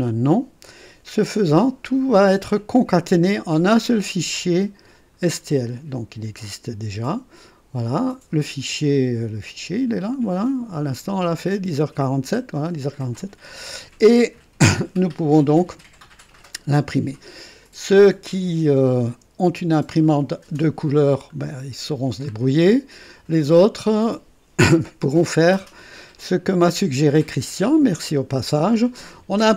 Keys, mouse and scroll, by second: 5.2 click, 6.4 click, 8.0 click, 9.4 click, 17.6 click, 19.4 Delete, 21.4 scroll up 1, 21.9 scroll down 1, 22.5-23.7 right drag.